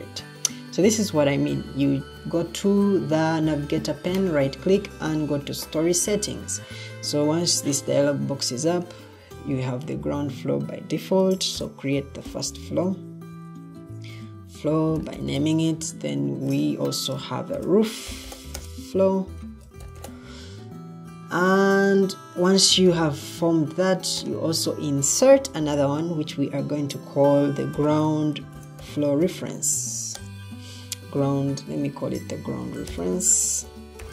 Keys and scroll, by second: 11.5-15.8 typing, 17.1-20.5 typing, 22.8 i, 27.6-34.1 typing.